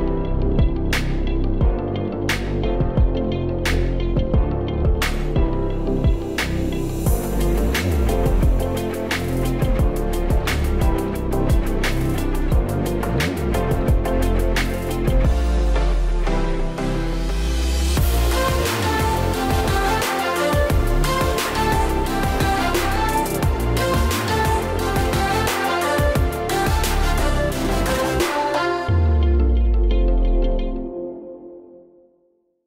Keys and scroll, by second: 0.0 Right, 0.4 Left, 4.0 typing.